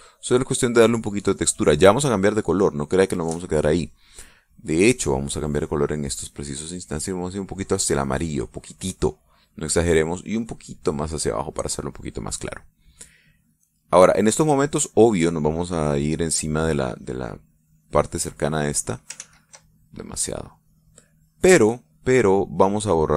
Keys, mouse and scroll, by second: 7.0-9.8 drag, 11.1-12.6 drag, 14.4-18.4 drag, 18.4-19.9 drag, 20.2 ctrl+z, 20.6-23.1 ctrl+drag.